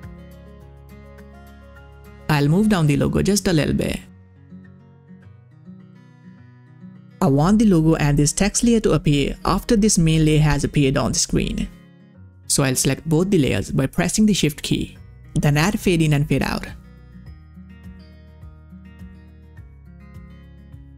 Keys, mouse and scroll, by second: 0.8 click, 2.4-6.7 drag, 12.4 click, 15.3-20.9 drag.